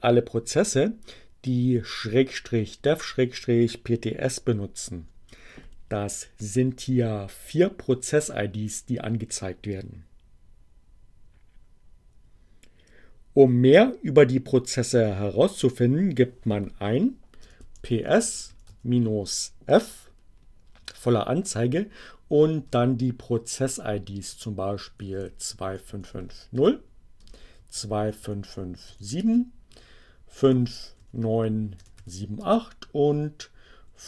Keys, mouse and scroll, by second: 15.3 p, 17.7 s, 17.9 space, 18.7 f, 22.9 space, 23.1 2, 25.7 5, 26.9 space, 28.1 5, 28.5 7, 30.3-32.1 typing, 33.2-34.0 typing.